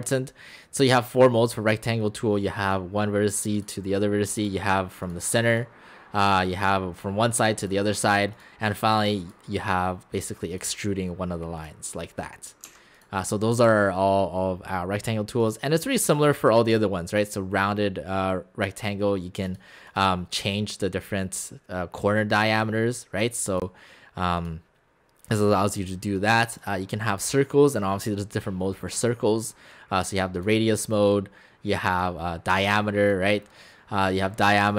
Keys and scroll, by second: 12.7 x.